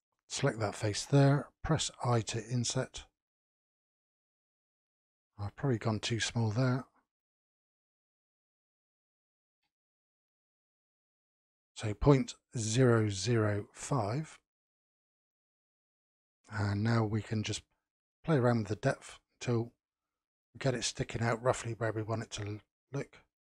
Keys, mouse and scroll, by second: 4.8-5.4 scroll up 3, 5.4-7.0 middle drag, 7.0-10.0 drag, 13.7-17.9 middle drag, 17.9-19.7 drag, 20.1-22.5 middle drag, 22.5 scroll down 3.